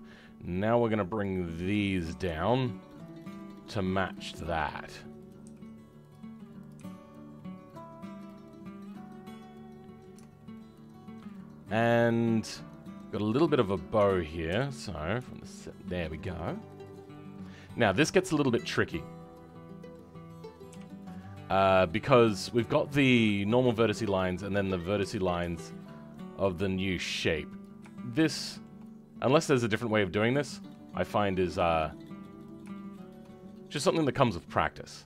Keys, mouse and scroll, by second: 1.1 click, 8.3 scroll down 2, 8.6-10.1 middle drag, 10.1 Tab, 10.5-12.5 middle drag, 13.9 Tab, 14.4 KP_7, 14.8-15.2 scroll up 2, 15.2-16.8 shift+middle drag, 16.8-18.5 drag, 18.8-20.6 middle drag, 20.6 KP_7, 21.1-25.0 scroll up 2, 25.0 g, 27.9-29.9 shift+middle drag, 29.9 scroll down 2, 30.2-32.4 middle drag, 32.4 click, 33.7 KP_7, 34.1-35.0 scroll up 2.